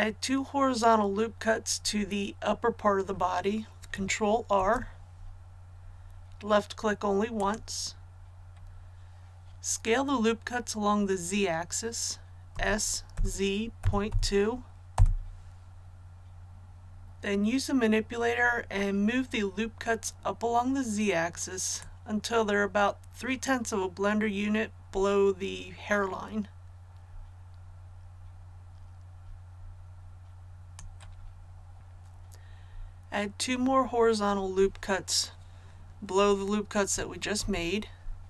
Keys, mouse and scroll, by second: 4.5 ctrl+r, 5.4-7.3 scroll up 1, 7.3 click, 12.5 s, 13.1 z, 13.8 KP_Decimal, 14.0 KP_2, 14.9 Return, 21.8-31.2 drag, 37.4 ctrl+r.